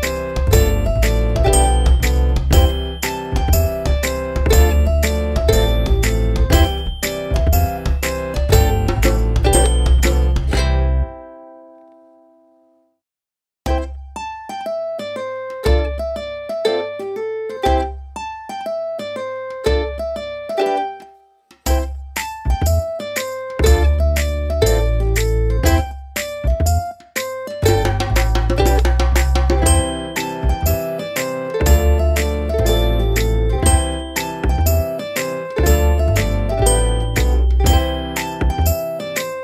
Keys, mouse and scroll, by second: 0.3 Return, 1.9 click, 5.9 alt+scroll down 1, 6.2 alt+scroll up 1, 6.3-6.7 alt+scroll down 1, 7.1 space, 7.2 click, 7.6 space, 8.6 alt+click, 13.8 click, 15.3 ctrl+0, 16.3 click, 19.7 ctrl+z, 20.8 click.